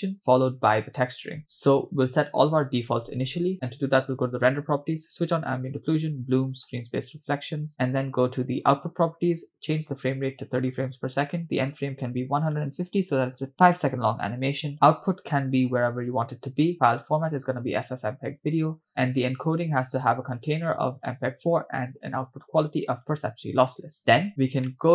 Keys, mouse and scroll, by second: 4.0 click, 5.3 click, 5.8 click, 6.5 drag, 8.6 click, 9.8-10.8 drag, 11.7-13.3 drag, 13.5-14.7 scroll down 3, 14.7-16.1 drag, 15.8 /, 17.1-18.6 drag, 18.9-19.9 scroll down 5, 19.2 click, 20.3-21.2 drag, 22.1-23.2 drag, 24.7 middle click.